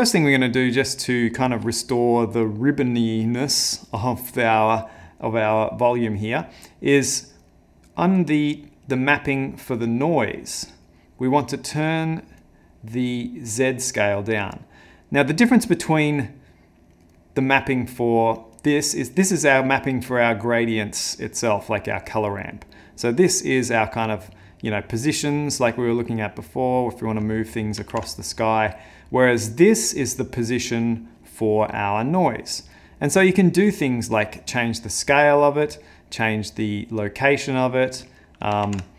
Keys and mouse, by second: 7.5 middle click, 8.9 click, 9.8 click, 11.7 click, 13.5 click, 17.2 middle click, 17.6 middle click, 18.6 click, 19.2 click, 25.2 click, 28.0 ctrl+z, 28.7 middle click, 29.1 middle click, 29.9 click, 31.8 click, 32.8 middle click, 37.0 click, 38.7 ctrl+z.